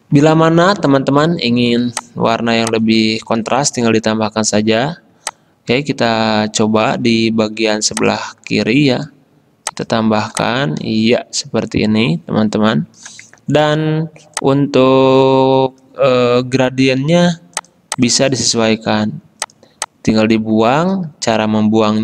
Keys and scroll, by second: 1.9 space, 7.5 a, 13.8 g.